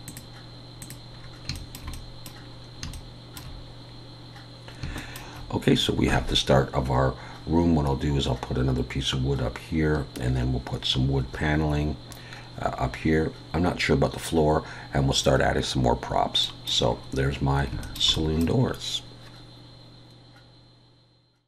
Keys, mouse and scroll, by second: 0.1 click, 1.2 click, 1.2-1.6 scroll down 2, 1.6 shift+middle click, 1.9 middle click, 2.5-2.9 scroll up 2, 2.9 shift+middle click, 4.2-4.6 scroll down 1, 5.0 shift+middle click, 9.9-11.1 scroll down 1, 16.5 middle click, 17.0 scroll up 1, 17.7 scroll up 1, 17.8 shift+middle click, 18.2 middle click.